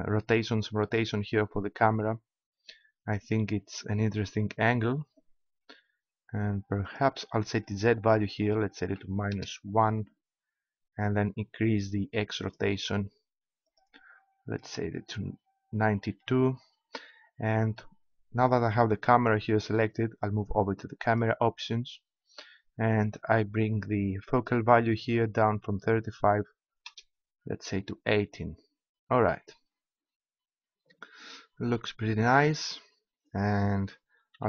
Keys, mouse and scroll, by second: 3.6-4.9 middle drag, 6.8-9.3 drag, 12.4-15.6 drag, 18.1-19.6 scroll up 1, 19.6-20.9 scroll up 1, 21.1-23.6 drag, 24.3-26.5 drag, 34.3 p.